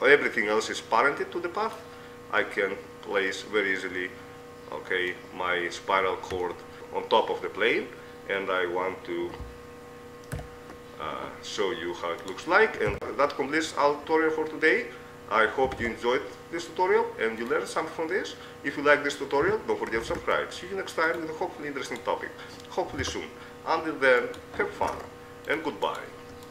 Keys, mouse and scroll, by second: 2.6-3.6 middle drag, 3.8 middle click, 5.4 middle click, 6.0 click, 10.7 ctrl+alt+KP_0, 12.5-13.6 drag, 12.9 g, 19.6 g, 22.0-23.8 right drag, 23.2 Tab, 24.4-26.2 right drag, 25.0 ctrl+Tab.